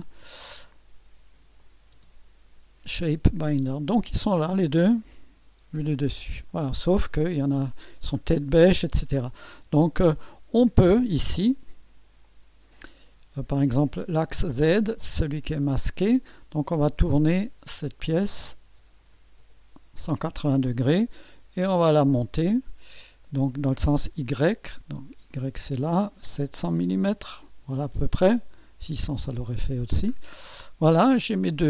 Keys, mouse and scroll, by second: 1.6 click, 1.9 space, 3.1 click, 3.5 space, 4.1-4.6 drag, 5.1 2, 6.0-6.3 scroll down 2, 6.5 right click, 8.2 scroll up 2, 8.7-9.0 scroll down 2, 11.5 click, 12.2 click, 17.3 click, 18.4-19.9 typing, 25.0 click, 26.4 KP_7, 26.8 KP_0, 29.0 click, 29.8-30.2 scroll up 1, 30.3-30.6 scroll down 1, 31.2-31.6 right drag.